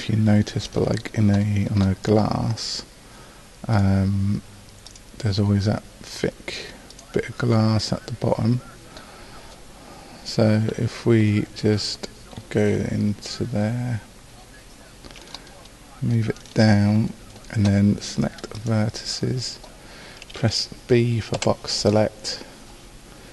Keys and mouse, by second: 7.2-8.4 drag, 10.7 KP_5, 11.8 KP_2, 21.4 b.